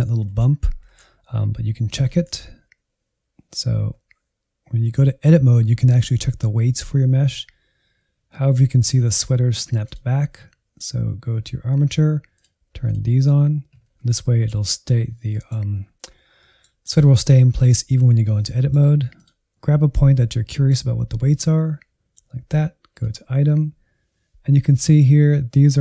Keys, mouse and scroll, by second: 0.3 Tab, 1.0 Tab, 2.2 Tab, 3.8-4.9 scroll down 1, 4.9-5.8 scroll down 4, 5.8-8.9 drag, 9.8-13.9 drag, 13.9-14.2 scroll up 3, 14.2-16.1 middle drag, 16.1-16.4 scroll up 2, 16.4-19.1 middle drag, 19.1 click, 19.7-22.9 middle drag, 22.9-25.8 drag.